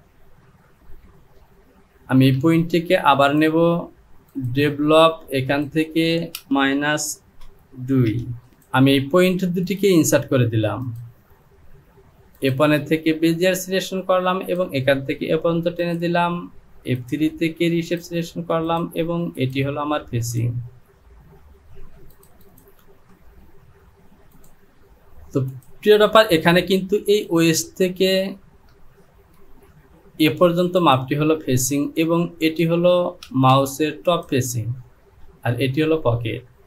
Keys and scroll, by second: 6.5 Down, 7.2 KP_3, 7.3 BackSpace, 8.1 KP_2, 29.4 alt+space, 33.3 space.